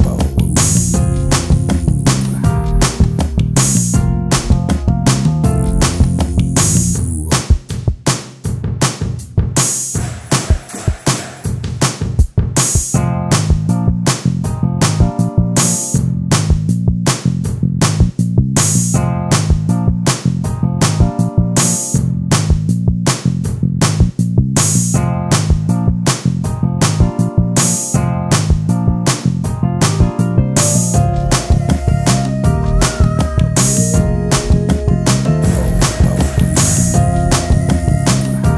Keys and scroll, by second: 0.4 ctrl+space, 1.3 space, 9.9 space, 16.2 ctrl+space, 17.0 t, 22.7 space, 29.5 ctrl+space.